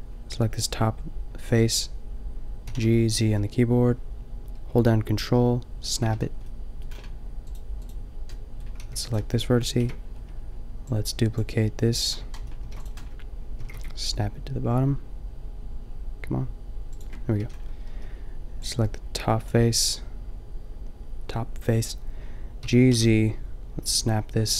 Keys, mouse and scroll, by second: 2.6 g, 6.0 a, 8.8 g, 9.7 ctrl+l, 11.3 ctrl+l, 11.3 g, 12.6 shift+d, 13.6 g, 17.4 a, 17.9 b, 22.6 g.